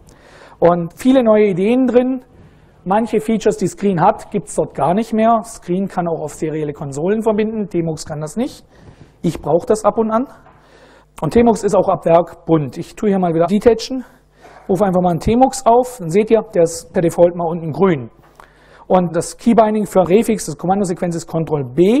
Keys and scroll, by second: 11.1 super+Right, 13.1 ctrl+a, 13.5 ctrl+d, 14.1-15.6 typing, 21.4 ctrl+b.